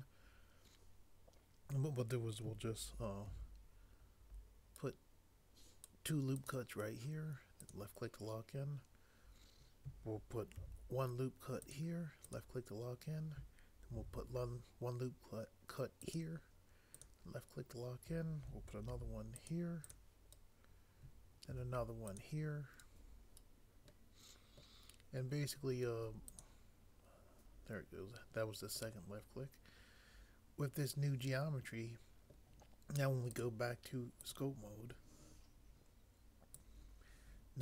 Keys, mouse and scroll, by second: 3.3 ctrl+r, 10.6 ctrl+r, 13.9 ctrl+r, 18.9 ctrl+r, 21.5 ctrl+r.